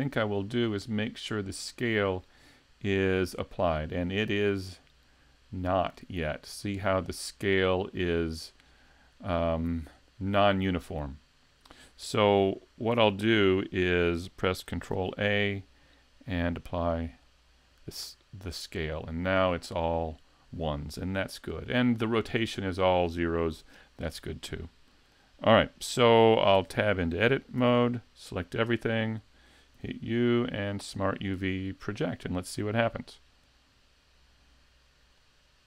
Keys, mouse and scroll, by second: 14.9 ctrl+a, 23.5 n, 24.7 shift+middle click, 26.6 Tab, 27.6 a, 29.8 u.